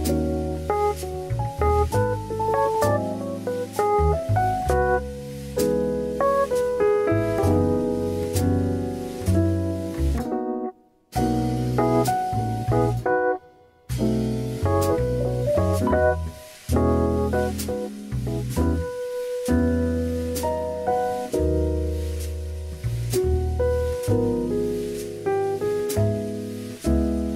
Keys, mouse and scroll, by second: 0.4 click, 1.1 middle click, 1.9 KP_1, 3.5 s, 5.7 click, 7.2-9.5 middle drag, 9.5 scroll down 2, 11.8 click, 12.2 middle click, 12.7-13.1 scroll down 2, 13.1 KP_1, 16.1 s, 17.1 ctrl+z, 19.0 middle click, 20.4 alt+shift+click, 20.9 KP_1, 22.0 s, 23.8 middle click, 25.0 alt+z, 25.2 middle click, 25.2 scroll up 1, 26.1 KP_1, 26.7 alt+z.